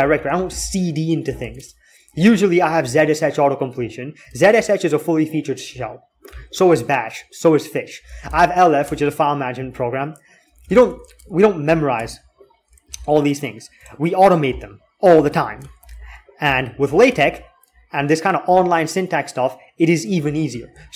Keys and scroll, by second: 0.3 c, 1.2 Tab, 1.3 Tab, 3.5 BackSpace, 3.8 BackSpace, 7.8-8.5 typing, 8.6 Return, 10.3 typing, 10.4 Return, 10.6 Return, 11.0 alt+x, 11.8 alt+x, 12.7 alt+x, 15.0 Escape, 15.6 alt+x.